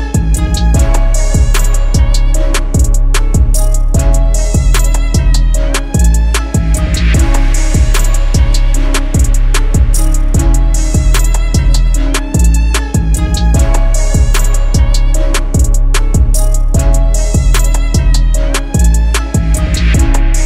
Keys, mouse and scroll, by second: 0.1 double click.